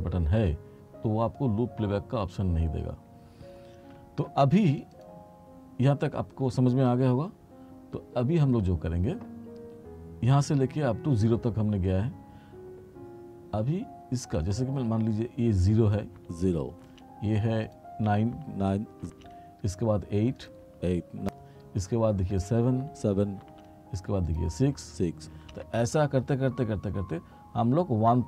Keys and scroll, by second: 16.3 space, 18.4 space, 20.7 space, 22.9 space, 24.8 space.